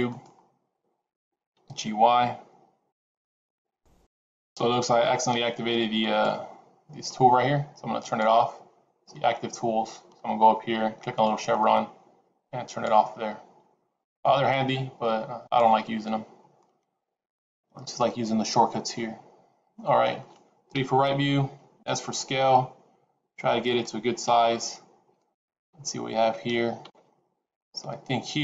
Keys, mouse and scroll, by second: 1.4 g, 5.1 click, 7.9 click, 11.1 click, 16.5 middle click, 20.6 KP_3, 21.8 s, 24.1 g.